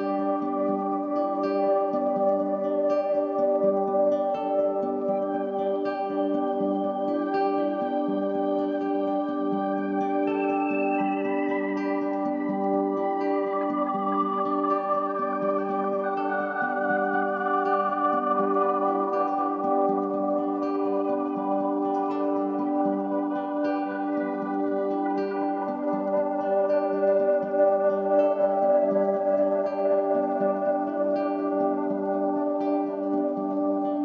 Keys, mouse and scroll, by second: 2.6-16.9 scroll up 1, 16.9 right click, 19.8 click.